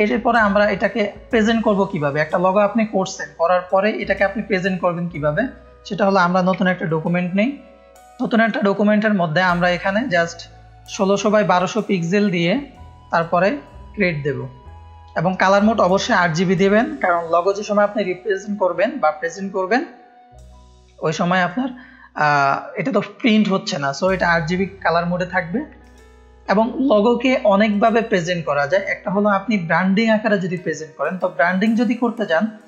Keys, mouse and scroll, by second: 0.3 click, 0.3 space, 1.0 click, 1.9 drag, 3.2 middle click, 6.8 n, 8.4 click, 9.5 click, 11.4 click, 13.7 click, 25.1 ctrl+space, 25.1 ctrl+click, 25.9 click, 25.9 space.